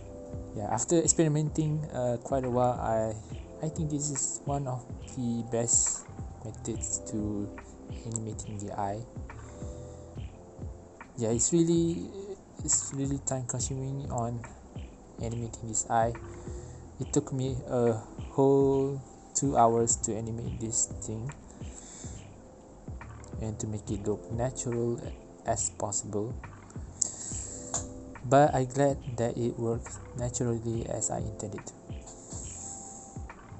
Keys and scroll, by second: 1.6 space, 2.2 space, 3.2 space, 3.5 space, 3.8 space, 4.2 ctrl+c, 5.2 ctrl+v, 5.3 space, 5.9 space, 8.1 u, 11.1 v, 17.0 ctrl+z, 21.3 space, 22.0 space, 22.0 ctrl+z, 23.1 space, 24.4 space, 24.5 ctrl+z, 24.6 ctrl+z, 24.8 ctrl+z, 25.4 space, 26.8 ctrl+z, 26.9 ctrl+z, 27.1 Delete, 31.8 ctrl+z, 32.1 ctrl+z.